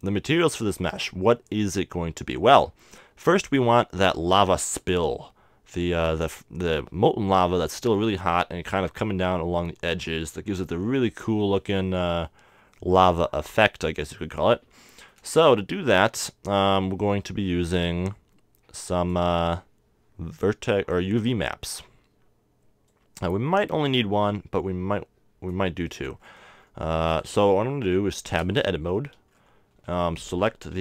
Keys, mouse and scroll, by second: 3.1 KP_7, 4.2 middle click, 10.3 middle click, 11.0 KP_7, 11.2 middle click, 14.5-18.5 middle drag, 19.0-20.7 drag, 22.9-26.2 drag, 26.2-28.6 middle drag, 28.6 Tab, 29.3 middle click, 29.8 a.